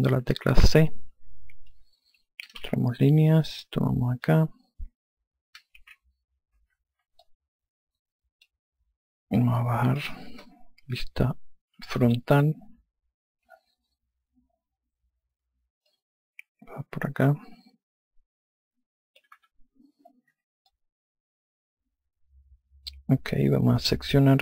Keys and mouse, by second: 0.6 click, 2.8-3.7 typing, 3.9 click, 5.9-6.9 typing, 7.8 click, 10.0 click, 11.5 F3, 12.6 F4, 16.5 click, 20.0 F1, 21.3 alt+click.